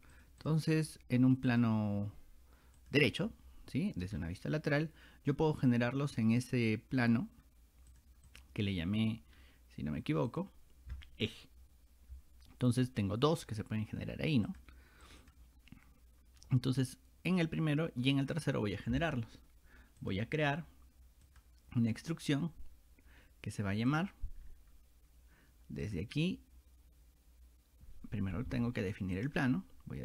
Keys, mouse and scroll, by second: 0.2 click, 0.4 click, 1.5 click, 2.8 click, 3.0 click, 4.2 scroll down 2, 6.0 scroll down 2, 7.9 click, 8.3 click, 9.4 middle click, 9.4 scroll down 1, 10.3 click, 14.5 click, 15.1 click, 15.2 click, 16.4 middle click, 16.4 scroll up 2, 20.0 click, 21.3 click, 23.9 click, 24.5 middle click, 24.5 scroll up 1, 25.9 click, 29.2 click.